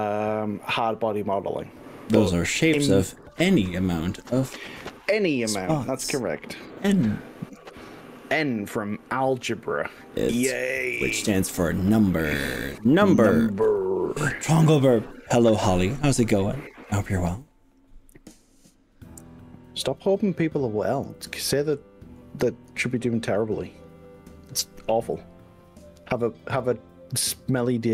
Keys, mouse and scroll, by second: 2.7-3.9 middle drag, 4.5 middle click, 4.9-6.5 drag, 6.5-8.7 middle drag, 8.7-13.9 drag, 19.8-22.3 middle drag.